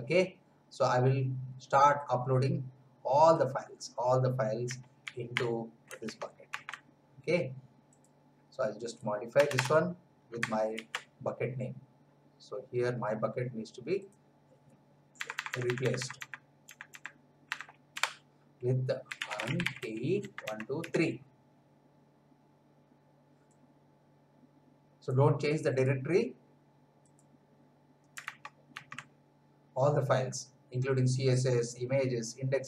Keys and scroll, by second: 5.0 ctrl+c, 6.1 alt+Tab, 9.3 Return, 10.7 ctrl+v, 15.1 BackSpace, 17.9 Delete, 18.9-21.2 typing, 28.4 alt+Tab.